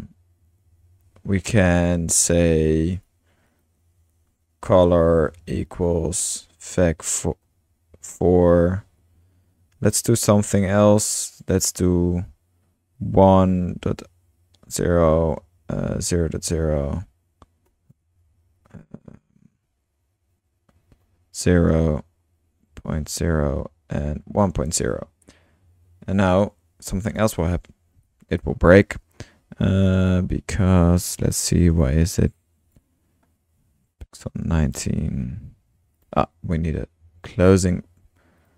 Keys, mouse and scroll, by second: 0.0 Return, 1.0 Return, 4.1 Tab, 4.5-6.1 typing, 7.2-9.3 typing, 12.1-16.5 typing, 17.8-19.5 typing, 20.7 typing, 22.6-25.1 typing, 27.1-27.6 shift+drag, 27.7-28.0 shift+middle drag, 28.0-28.6 drag, 28.9 click, 29.8 click, 30.4 click, 32.3-32.8 drag, 36.0 click, 38.4-38.5 drag.